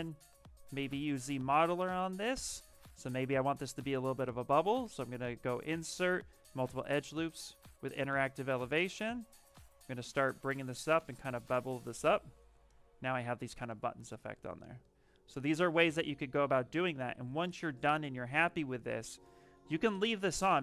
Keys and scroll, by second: 0.2 z, 2.8 space, 13.8 shift+f, 15.3 w, 17.1 q, 20.5 shift+r.